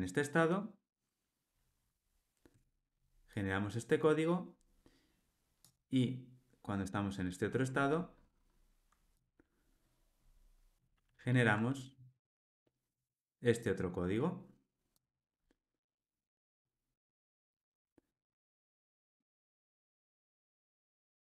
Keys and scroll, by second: 11.2 super+BackSpace.